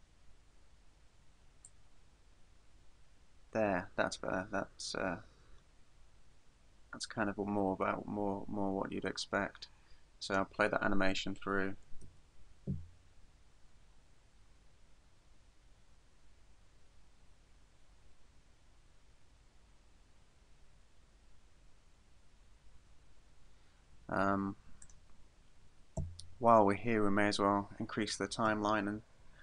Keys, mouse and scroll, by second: 1.7 click, 12.1 alt+a, 24.9 click, 26.0 Escape, 26.9-27.6 scroll down 3.